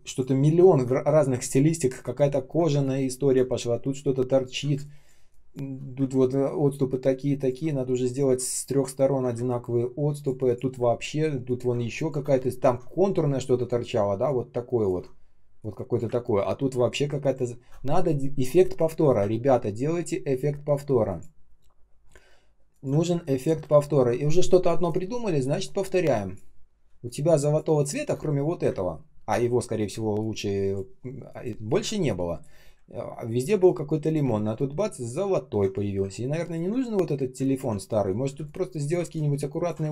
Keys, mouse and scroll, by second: 1.0 ctrl+scroll down 1, 1.3 ctrl+scroll up 1, 2.3 ctrl+scroll down 1, 2.6 space, 3.1 space, 3.1 space, 4.4 ctrl+scroll down 1, 4.6 space, 5.1 space, 5.2 space, 6.0 ctrl+scroll up 1, 7.3 ctrl+click, 9.0 ctrl+scroll down 1, 9.2 space, 9.7 space, 9.8 space, 10.8 ctrl+scroll up 1, 11.7 space, 12.4 shift+x, 14.2 alt+click, 16.1-16.6 ctrl+scroll down 1, 16.6 space, 17.2 space, 17.2 space, 19.2 ctrl+scroll up 1, 21.0 ctrl+click, 21.9 ctrl+scroll down 1, 22.6 ctrl+click, 23.0 space, 23.5 space, 23.7 ctrl+scroll down 1, 25.3 space, 25.8 space, 25.9 space, 29.0 space, 29.8 space, 30.3 space, 32.8 ctrl+scroll up 1, 33.2 ctrl+scroll down 1, 33.5 space, 34.0 space, 34.0 space, 34.4-35.1 ctrl+scroll up 1, 35.2-36.0 ctrl+scroll down 1, 36.0-36.3 ctrl+scroll up 1, 37.5-38.2 ctrl+scroll down 1, 38.2 r, 39.0 alt+click, 39.8 ctrl+d.